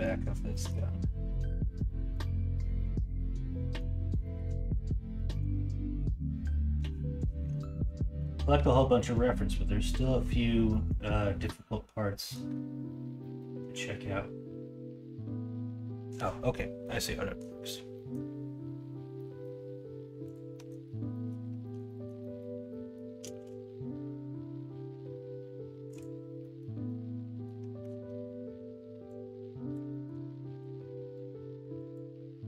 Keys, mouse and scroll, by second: 16.8-17.4 middle drag, 17.9 middle drag, 19.2 middle click, 20.5 middle click, 21.1 middle drag, 21.6 middle click, 21.8 middle click, 22.2 middle click, 22.7 middle click, 23.3 shift+a, 26.4 middle click, 26.9-27.5 middle drag, 27.8 Tab, 29.9 middle click.